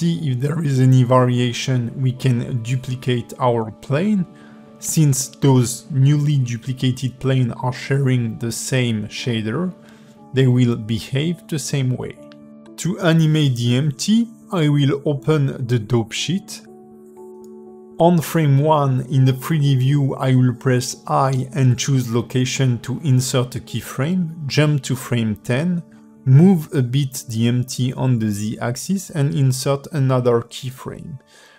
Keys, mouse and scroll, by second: 0.1 click, 0.8 shift+d, 5.7 g, 6.7 s, 7.8 g, 8.8 shift+d, 10.3 s, 11.1 g, 12.0 click, 12.2 g, 15.0 click, 15.8 click, 18.4 i, 22.5 click, 23.2 click, 24.2 g, 26.8 i, 28.5 a.